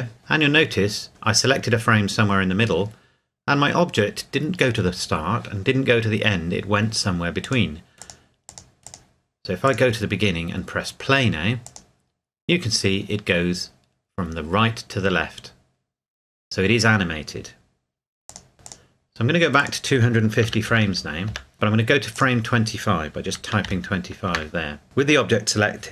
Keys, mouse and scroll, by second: 7.4-8.8 scroll down 1, 8.8 click, 18.3 click, 20.4 KP_2, 20.7 KP_5, 20.9 KP_0, 21.3 KP_Enter, 22.1 click, 23.3 KP_2, 23.6 KP_5, 24.3 KP_Enter.